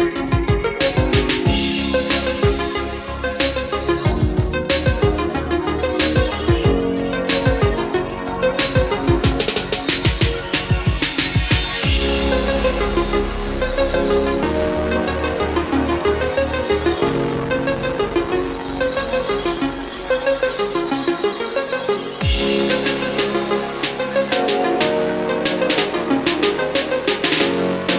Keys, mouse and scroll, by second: 18.4 scroll up 1, 19.4-20.8 drag, 21.3-23.4 typing, 24.9-26.6 typing.